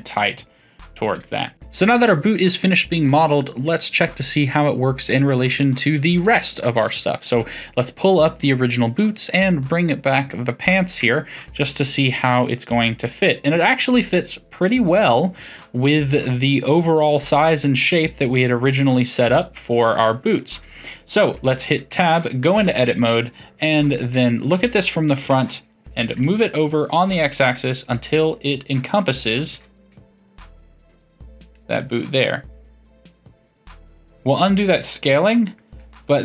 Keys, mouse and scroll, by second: 6.9-10.0 drag, 10.2 click, 11.0-14.5 shift+middle drag, 16.3-21.9 middle drag, 21.9 Tab, 22.4 a, 23.9 KP_3, 24.5 KP_1, 26.0 g, 29.5 s, 31.7-35.5 middle drag, 36.1-36.2 middle drag.